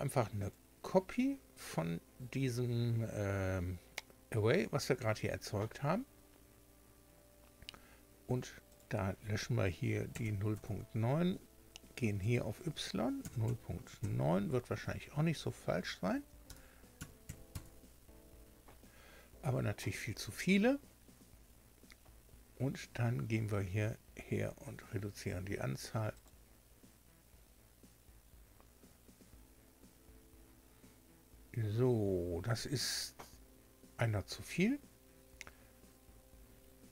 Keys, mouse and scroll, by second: 0.4 click, 8.7 click, 10.1 KP_0, 10.5 KP_Enter, 12.2 click, 13.2 KP_0, 14.0 KP_9, 16.4 BackSpace, 17.0 KP_Decimal, 17.2 KP_9, 17.5 KP_Enter, 19.1 scroll down 2, 19.8 scroll down 2, 20.7 scroll down 2, 21.2 scroll up 2, 26.1 click.